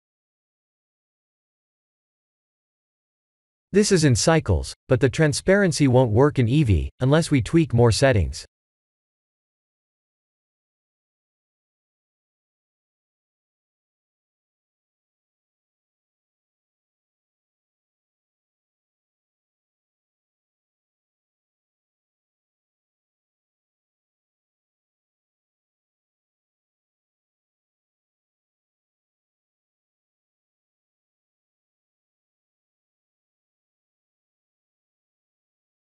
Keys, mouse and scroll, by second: 1.0 middle click, 2.8 click, 3.7 click, 8.6 click, 9.2 click, 12.0-12.6 drag, 15.9 click, 16.9-18.8 middle drag, 20.7 click, 21.1 click, 28.3 click, 33.8-35.7 drag.